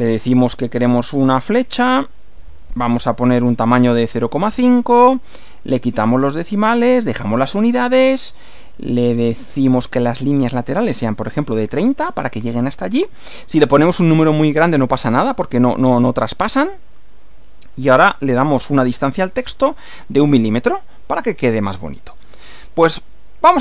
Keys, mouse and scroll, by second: 0.3 click, 0.9 click, 1.8 click, 3.2-4.4 typing, 5.4 click, 5.9-6.4 scroll down 2, 6.9-8.8 drag, 9.3 click, 11.0-11.8 typing, 13.2-14.5 drag, 17.3 click, 17.8 click, 19.1 1, 19.5 m, 21.0 click, 22.2 middle click, 22.9 shift+middle click.